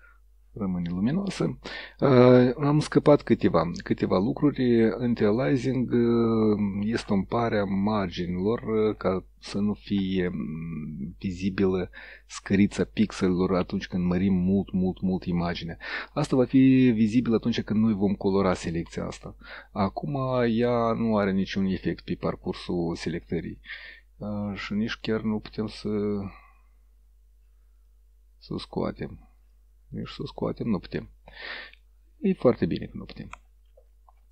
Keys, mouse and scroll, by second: 21.0 click, 21.5 click, 21.9 click, 22.5 click, 23.1 click, 23.7 click, 26.0 click, 27.9 click, 29.4 click, 30.0 click.